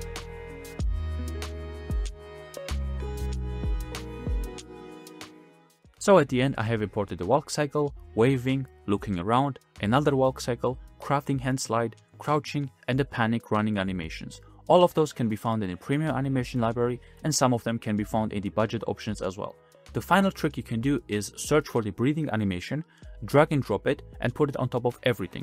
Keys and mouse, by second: 0.0 click, 0.1 click, 0.5 click, 0.6-5.5 typing, 1.0 click, 1.9 middle click, 2.1 click, 3.0 middle click, 3.2 middle click, 5.1 middle click, 5.7 middle click, 7.5 middle click, 8.6 middle click, 9.7-10.3 middle drag, 11.4 middle click, 12.7 middle click, 13.7 middle click, 16.1 middle click, 18.6 middle click, 18.9-21.6 middle drag, 21.8 middle click, 24.8 shift+a.